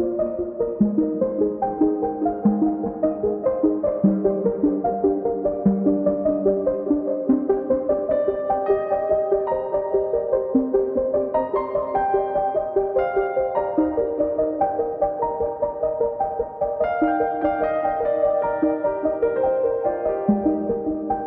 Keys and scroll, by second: 1.2 1, 1.9 Return, 2.9 m, 4.5 1, 4.9 Return, 6.2 l, 7.6 space, 12.6 m, 17.5 space.